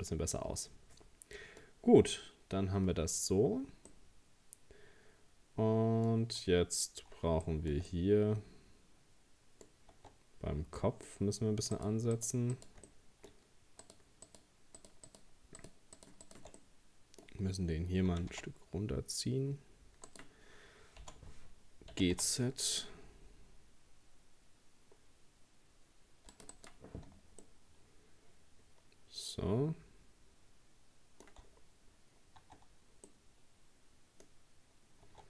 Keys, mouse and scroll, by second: 2.7-3.7 scroll down 2, 3.9-6.9 middle drag, 6.9-7.5 scroll down 1, 7.5-9.7 shift+middle drag, 9.7-10.0 scroll up 2, 10.0 Tab, 10.4-10.7 scroll down 2, 10.8 middle click, 11.8 right click, 12.2 shift+right click, 12.5 shift+right click, 12.9 middle click, 13.8 shift+right click, 14.3 shift+right click, 14.8 shift+right click, 15.1 shift+right click, 15.6 shift+right click, 16.0 shift+right click, 16.2 shift+right click, 16.6-18.1 middle drag, 18.1 g, 21.0 o, 21.9 g, 26.5 right click, 27.4-30.5 middle drag, 31.5-32.0 scroll down 2, 32.0-32.5 scroll up 2, 32.5 Tab, 33.1-34.3 middle drag, 34.3-34.8 scroll up 1, 35.1 Tab.